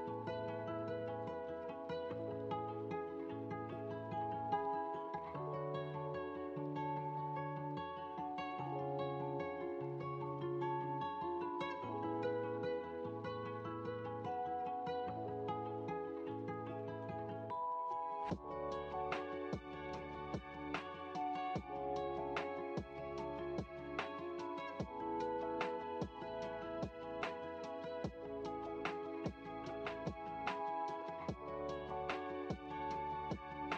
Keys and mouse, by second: 3.1 x, 7.0-9.1 drag, 22.0-25.1 drag, 27.2-28.6 drag, 30.1-32.0 drag, 32.5-33.7 drag.